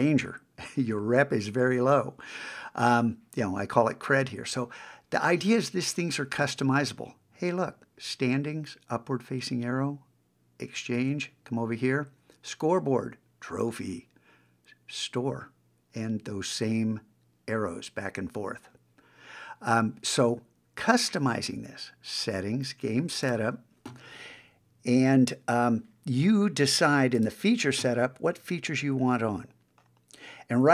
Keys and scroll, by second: 11.0 super+Tab.